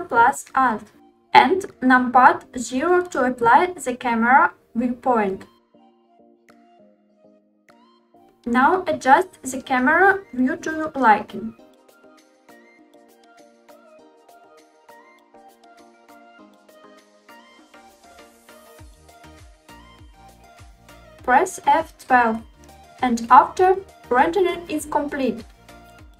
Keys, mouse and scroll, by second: 5.7 ctrl+alt+KP_0, 8.1 g, 8.2 z, 11.1 click, 11.4 r, 11.4 x, 14.0 click, 14.2 g, 14.2 y, 15.4 g, 15.4 z, 17.2 r, 17.6 x, 20.4 F12.